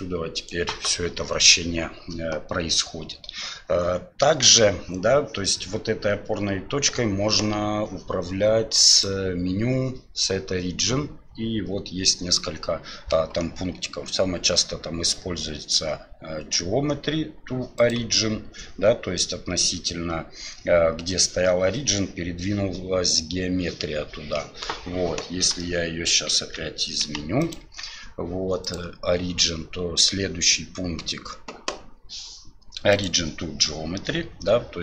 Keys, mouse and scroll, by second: 9.1-17.9 drag, 25.6-26.1 shift+middle drag, 26.4 Tab, 27.0 g, 27.6 Tab, 28.7-33.1 drag.